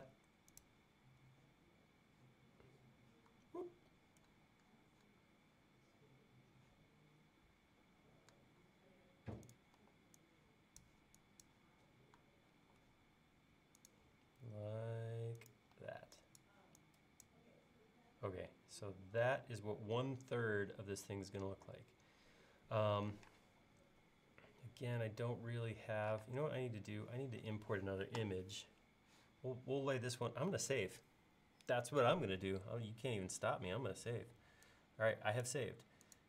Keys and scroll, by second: 9.8 e, 12.6 l, 15.8 e, 23.2 p, 26.3 space, 30.5 super+s.